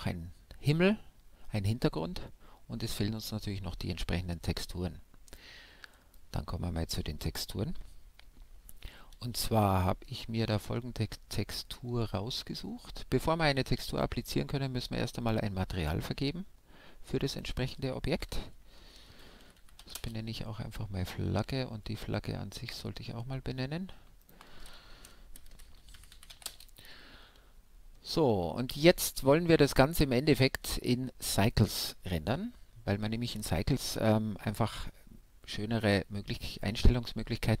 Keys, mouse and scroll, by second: 4.1-5.8 drag, 8.3-12.4 middle drag, 12.4-18.2 drag, 18.2 g, 20.2-22.8 middle drag, 22.8-24.8 drag, 24.8 g, 27.8-34.7 middle drag, 34.7-36.8 scroll down 1, 36.8-37.6 middle drag.